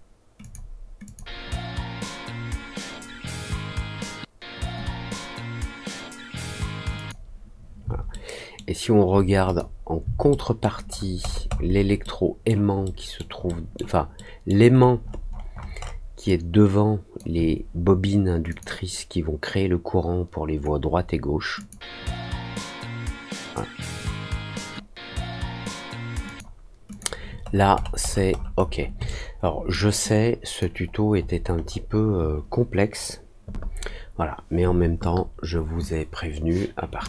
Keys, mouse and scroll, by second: 0.3 click, 1.0 click, 6.9 click, 8.0 alt+middle click, 9.4 click, 10.2 alt+middle click, 10.9 alt+middle click, 11.1 alt+middle click, 12.0 alt+middle click, 12.8 alt+middle click, 13.4 alt+middle click, 14.1 alt+middle click, 14.7 alt+scroll up 1, 15.2-15.7 alt+scroll up 2, 16.2 alt+click, 18.4 click, 21.5 click, 26.2 click, 26.8 click, 27.4-28.7 scroll down 5, 29.0 alt+middle click, 30.0 alt+click, 30.8 alt+scroll down 1, 31.1 alt+middle click, 31.5 alt+middle click.